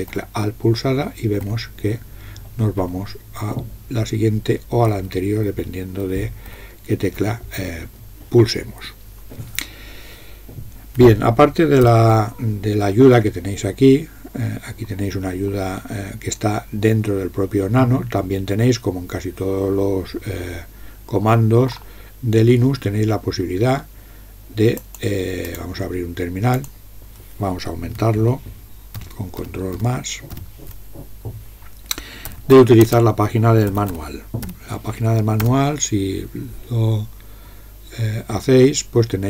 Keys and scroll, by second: 0.1 alt+Up, 1.5 alt+Up, 2.8 alt+Down, 4.9 alt+Down, 5.5 alt+Up, 6.1 alt+Down, 6.5 alt+Up, 11.9 ctrl+g, 29.0 ctrl++, 29.5 ctrl++, 29.8 ctrl++, 30.4 ctrl++, 32.1-34.5 typing, 35.5 Return.